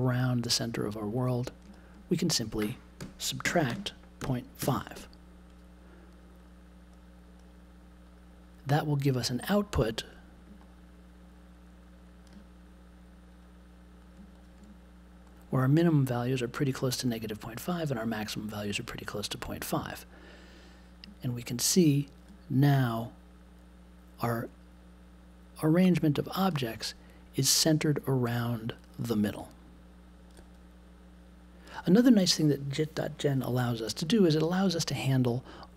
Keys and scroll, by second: 2.9-4.6 typing.